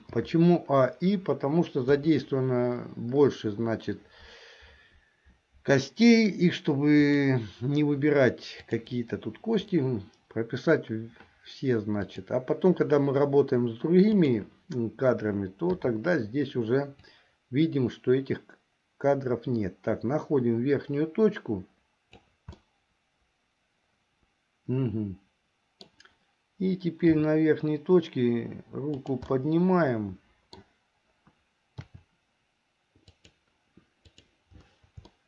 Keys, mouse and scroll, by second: 0.1 i, 1.9 KP_1, 7.1 click, 8.7 click, 12.1 click, 14.3 click, 15.9 i, 17.2-22.5 drag, 22.8-26.1 middle drag, 27.1 g, 29.5-30.8 middle drag, 32.0 r, 34.3 click.